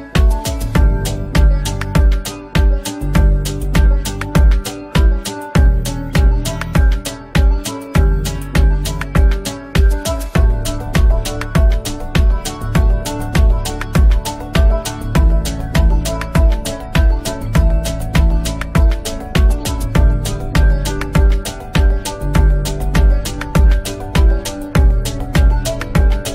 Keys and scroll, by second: 2.9 ctrl+z, 4.0 ctrl+shift+z, 5.5 F2, 8.4 Escape, 11.2 F3, 12.6 ctrl+g, 13.9 F3, 14.1 F2, 22.2 ctrl+g, 22.9 c, 23.2 Escape, 23.5 F4.